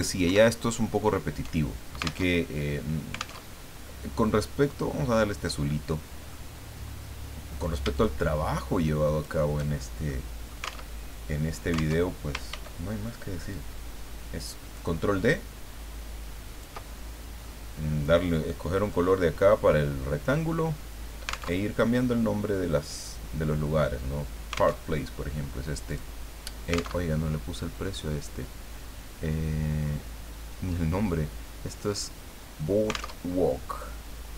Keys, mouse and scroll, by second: 0.2 alt+Up, 2.3 alt+Tab, 4.7 click, 5.4 middle click, 7.9-9.4 shift+drag, 10.0 click, 11.0 alt+Tab, 12.0 alt+Tab, 12.5 ctrl+d, 13.5-16.9 ctrl+drag, 21.6 alt+Tab, 24.8 alt+Tab, 25.8 click, 27.1 alt+Tab, 33.1 alt+Tab.